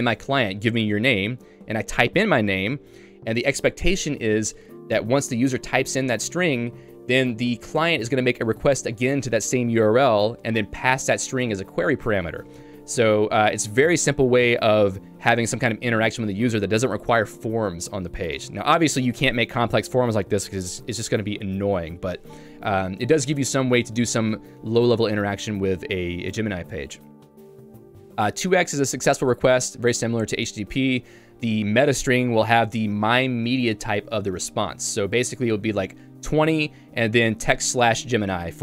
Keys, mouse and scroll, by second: 30.7-38.5 typing.